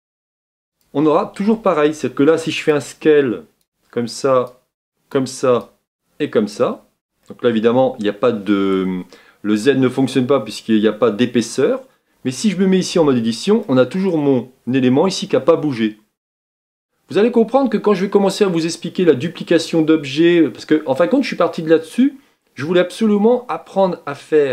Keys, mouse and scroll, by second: 2.9-7.2 drag, 7.2-12.9 middle drag, 12.9 Tab, 13.6-24.5 middle drag.